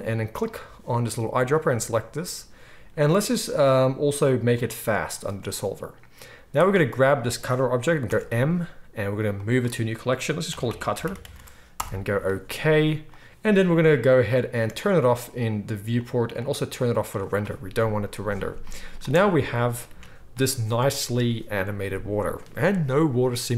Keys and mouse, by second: 4.5 middle click, 4.5 right click, 6.5-8.0 middle drag, 8.0 m, 11.0 t, 15.9-17.0 middle drag, 19.0-23.5 drag, 19.0 space, 19.9 ctrl+s.